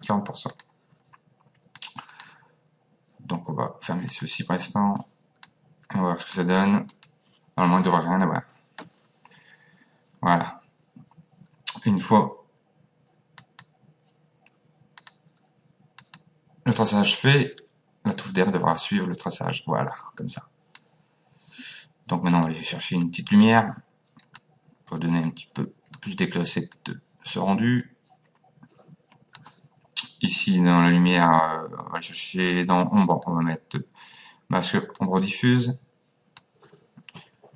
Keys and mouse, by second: 0.5 click, 1.8 click, 4.1 click, 5.5 click, 6.9 click, 13.4 click, 15.0 click, 20.8 click, 23.0 click, 25.6 click, 26.8 click, 33.2 click, 36.4 click.